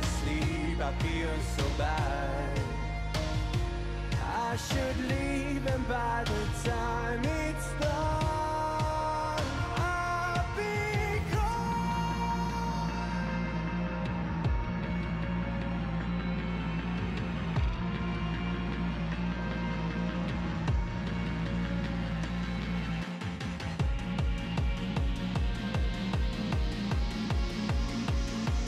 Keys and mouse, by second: 2.8 click, 7.7 click, 12.2 click, 15.5 click, 16.4 click, 19.1 click, 20.3 click, 23.6 click, 27.9 click.